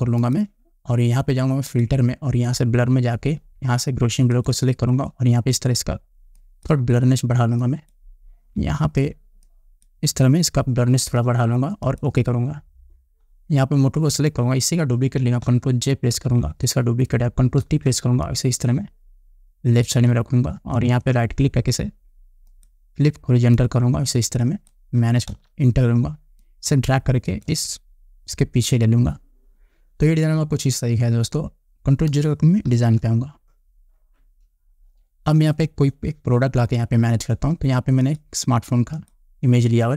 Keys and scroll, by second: 16.7 ctrl+j, 18.2 ctrl+t, 25.9 Return, 33.3 ctrl+0.